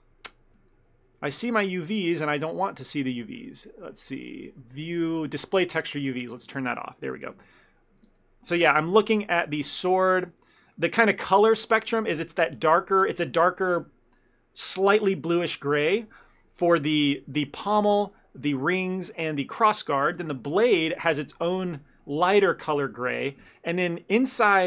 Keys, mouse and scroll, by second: 0.0 click, 7.0 ctrl+space, 7.3 ctrl+space.